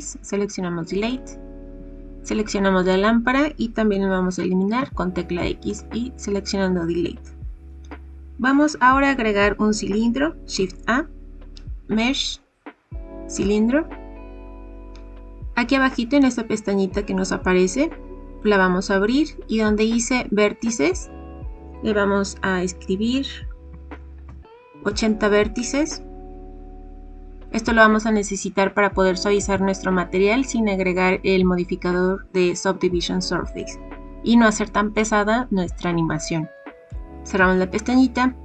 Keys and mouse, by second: 2.8 click, 4.7 x, 10.5 shift+a, 21.2-25.2 drag, 36.8 click.